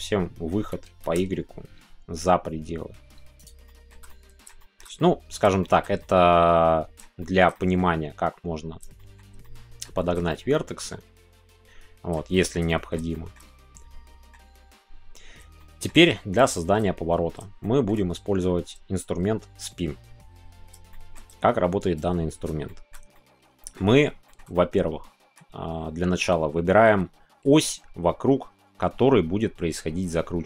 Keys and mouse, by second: 1.2 shift+y, 3.4 shift+click, 3.7 shift+middle click, 4.1 middle click, 4.6 shift+middle click, 5.0 middle click, 5.6 shift+middle click, 6.0-7.0 middle drag, 7.2 shift+middle click, 7.5 middle click, 8.9 shift+middle click, 9.4 middle click, 10.0 shift+click, 10.1 middle click, 10.3-12.1 middle drag, 12.3 shift+middle click, 12.6 middle click, 13.1 shift+click, 13.8-15.4 middle drag, 15.5 shift+middle click, 16.5 shift+middle click, 17.6-20.7 shift+middle drag, 20.9 shift+middle click, 21.9 click, 22.6 shift+middle click, 23.1 middle click, 24.2 shift+middle click, 24.5 middle click, 24.7 click, 24.7 right click.